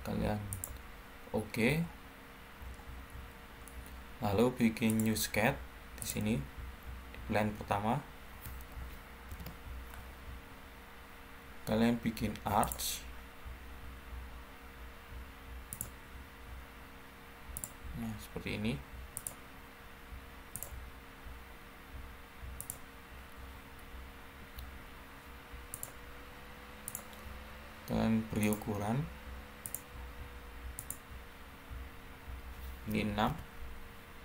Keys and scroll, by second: 9.2 ctrl+8, 24.3 Escape, 32.8 6, 33.2 Return.